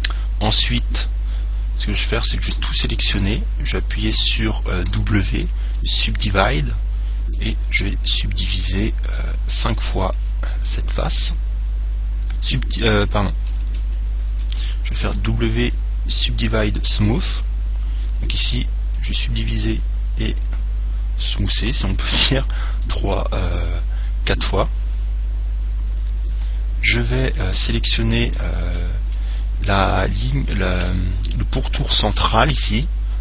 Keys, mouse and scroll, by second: 2.7 a, 3.1 a, 5.1 w, 7.6 click, 10.8-12.6 middle drag, 14.0 ctrl+z, 15.2 w, 19.1 click, 23.9 click, 31.1-33.2 middle drag.